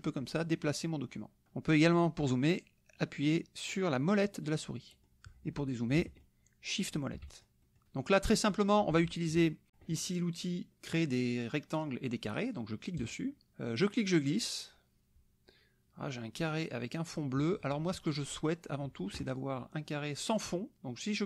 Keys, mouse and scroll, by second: 4.4 click, 5.1 click, 6.2 shift+click, 6.9 shift+click, 7.3-8.7 shift+drag, 9.3 KP_Subtract, 12.9 click, 13.9-17.3 drag.